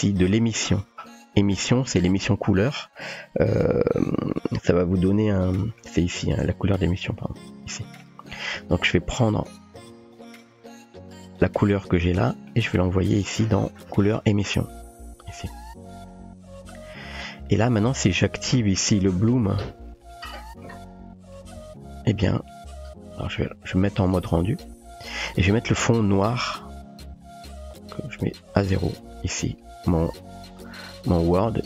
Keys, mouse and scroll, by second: 0.5 middle click, 2.6-4.4 typing, 5.7 middle click, 7.0-7.8 drag, 7.8 typing, 8.0 middle click, 8.9 click, 9.8-10.2 drag, 10.2 typing, 10.7-11.4 drag, 11.4 typing, 12.3 middle click, 13.4-14.9 drag, 14.9-15.4 typing, 18.6 typing, 18.6 click, 20.0 click, 26.0 click, 27.8 click, 31.1 click.